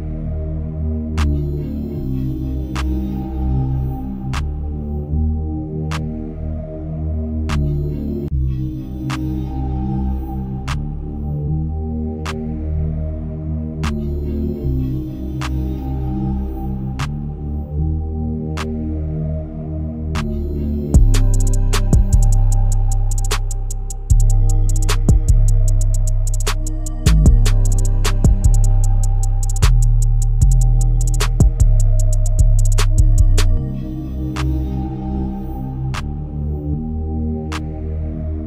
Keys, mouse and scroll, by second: 3.2-22.5 shift+drag, 11.0 shift+Left, 22.5-22.9 scroll down 1, 22.9-32.3 shift+middle drag, 32.3 click, 35.1-38.4 drag.